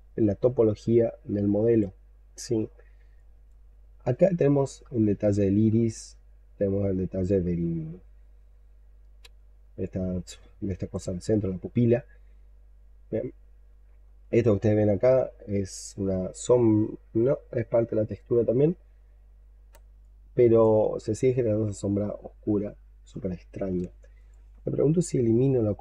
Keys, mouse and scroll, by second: 1.9-3.0 alt+scroll down 14, 3.0 alt+click, 3.8-4.6 scroll up 6, 5.0 alt+middle click, 9.7 alt+click, 11.5 alt+middle click, 12.1-12.9 scroll down 11, 13.3 alt+middle click, 15.4 scroll down 3, 15.6-16.2 scroll up 7, 17.0-17.4 scroll up 4, 18.0-18.4 scroll up 6, 18.4-19.7 scroll down 9, 19.9 alt+click, 20.7-21.2 alt+scroll down 6, 21.8-22.5 scroll down 6, 22.6 alt+middle click, 25.4-25.8 scroll up 5.